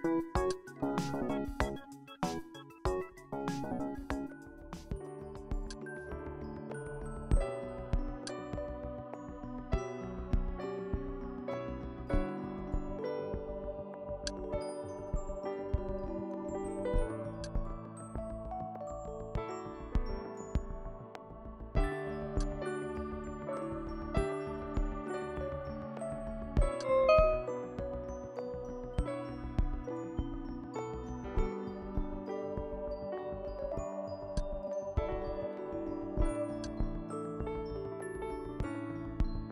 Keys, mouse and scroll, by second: 0.5 click, 2.5 KP_5, 5.7 click, 8.3 ctrl+click, 9.9 ctrl+Return, 14.3 ctrl+click, 15.4 click, 17.5 click, 19.7 Return, 22.4 click, 25.3 KP_2, 26.8-30.9 drag, 34.4 click, 36.0-38.9 drag, 38.6 Delete.